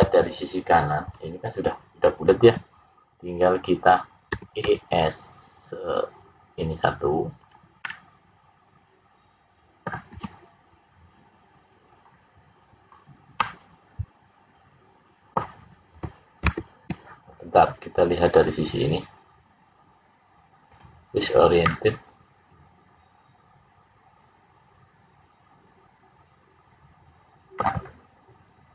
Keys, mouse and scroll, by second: 4.6 e, 7.7 middle click, 11.8-12.8 scroll up 2, 12.8-13.4 scroll up 1, 13.4 middle click, 13.4-15.3 scroll up 1, 16.4 ctrl+z, 18.3 click, 21.6 middle click.